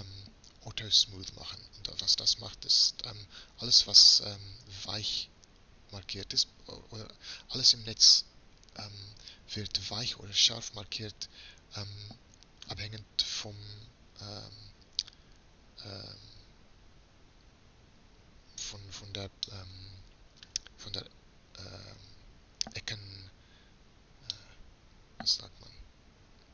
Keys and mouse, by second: 2.1-2.7 middle drag, 19.6-26.0 middle drag, 26.3-26.5 middle drag.